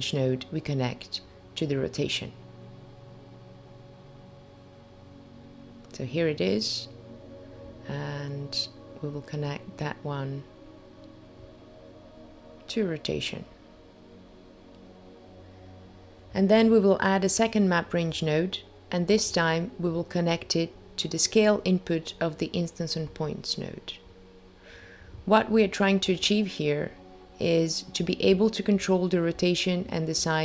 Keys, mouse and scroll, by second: 4.7 click, 5.9 click, 6.8 click, 9.4 click, 14.6 click, 14.8 shift+a, 21.3 click, 24.2 click, 29.1-29.8 scroll down 2, 29.8-30.4 scroll down 1.